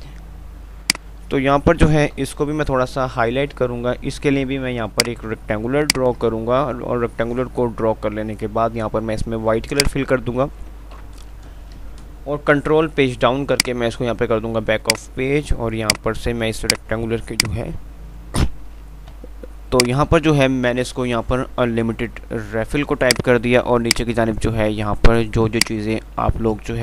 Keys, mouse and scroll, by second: 0.1 F2, 0.8 click, 1.1 F2, 2.4 shift+Page_Up, 5.2-9.8 drag, 11.2 ctrl+Page_Down, 13.9 click, 15.1 right click, 19.4 click, 20.4 F3, 23.4-26.8 drag.